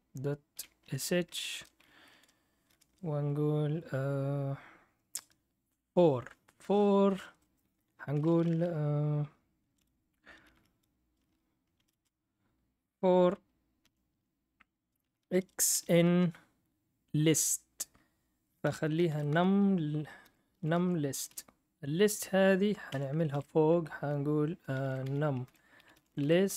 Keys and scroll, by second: 0.0-2.6 typing, 1.5 Return, 10.2-12.3 typing, 13.8 i, 14.9-21.8 typing, 22.9 Caps_Lock, 22.9 Escape, 23.3-26.5 typing.